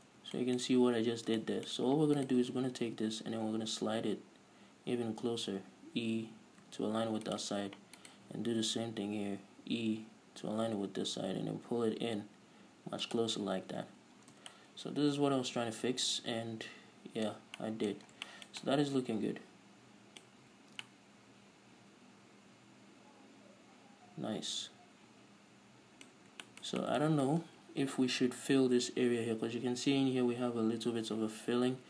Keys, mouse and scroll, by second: 0.6 Tab, 1.5 Tab, 2.5 alt+right click, 3.3 g, 7.9 shift+click, 8.3 alt+right click, 8.9 g, 13.5 click, 13.9 scroll down 1, 14.0 a, 14.5-14.9 scroll down 1, 14.9 Tab, 14.9-31.8 middle drag, 17.6-17.9 scroll up 2, 18.4 scroll down 2, 20.7 scroll up 2, 20.8 a, 26.4-26.8 scroll up 2.